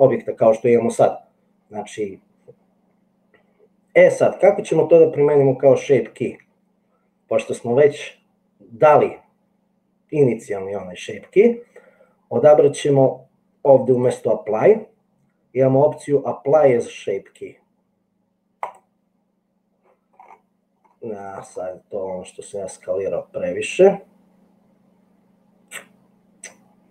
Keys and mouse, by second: 14.1-18.9 drag.